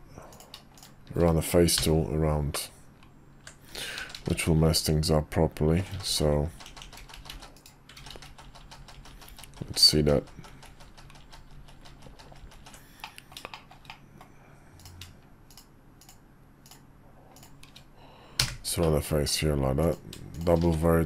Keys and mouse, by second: 0.3 click, 1.8-3.3 f, 3.9 ctrl+f, 8.0-10.3 ctrl+z, 10.5 ctrl+z, 10.7-12.2 ctrl+z, 12.4 ctrl+z, 12.5 ctrl+z, 13.0 middle click, 13.6 shift+middle click, 13.9 middle click, 14.8 click, 15.5 shift+click, 16.0 shift+click, 18.4 f, 18.8 middle click, 19.8 click, 20.3 shift+click, 20.6 1.